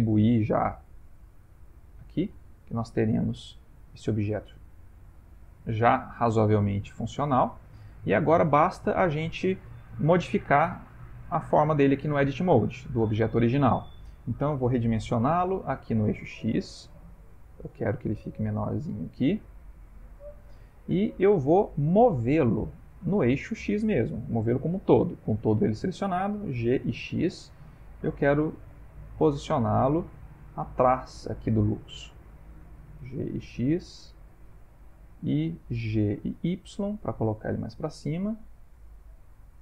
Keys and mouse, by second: 0.9 click, 3.4 middle click, 5.3 ctrl+middle click, 6.6 shift+middle click, 6.7 shift+middle click, 7.7 click, 8.4 Tab, 16.3 s, 20.7 shift+middle click, 26.5 g, 30.9 shift+middle click, 32.0 ctrl+middle click, 33.0 g, 37.9 g.